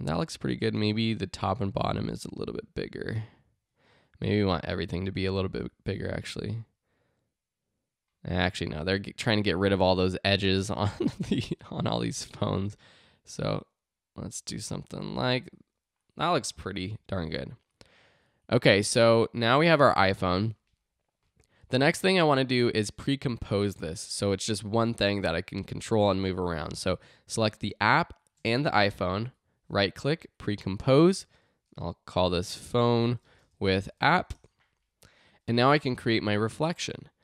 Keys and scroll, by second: 32.4-34.5 typing.